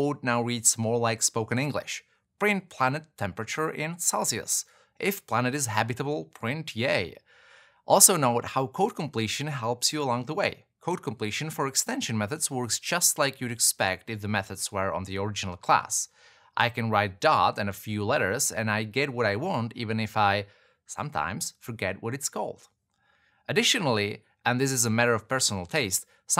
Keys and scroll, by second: 1.5 alt+BackSpace, 2.7 Return, 6.8 Return, 11.0 shift+Return, 12.7 shift+Return, 18.8 super+v.